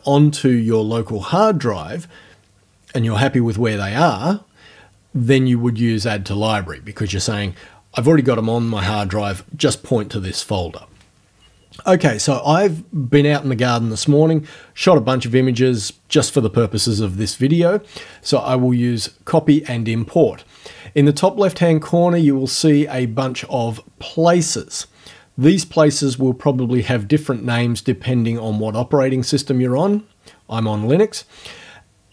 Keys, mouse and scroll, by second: 18.1 click.